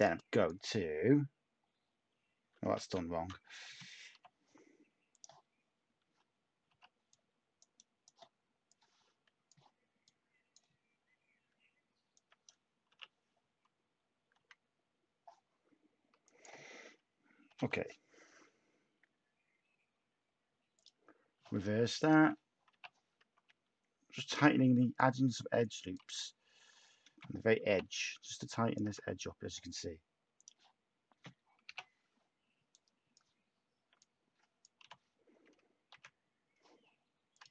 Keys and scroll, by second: 2.7 ctrl+z, 3.7 /, 6.7 /, 11.5 Tab, 12.8 u, 14.3 x, 17.2-18.1 typing, 22.1 /, 23.3-24.0 typing, 26.1 x, 27.4-28.8 typing, 31.6 /, 34.8 u, 35.9 x.